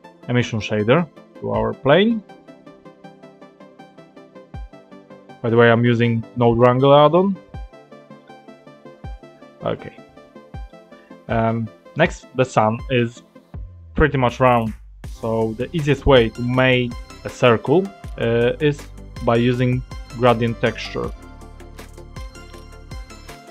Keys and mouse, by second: 7.9 ctrl+shift+click, 10.7 click, 16.1 click, 19.9 shift+a.